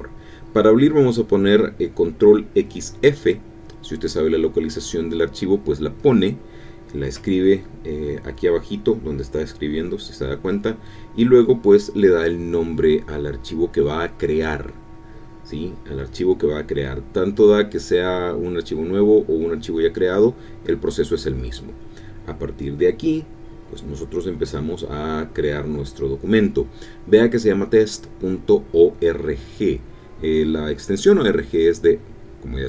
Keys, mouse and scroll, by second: 7.8-8.7 typing, 14.1-16.9 typing, 17.8 Return, 30.6 KP_Multiply, 31.6 space.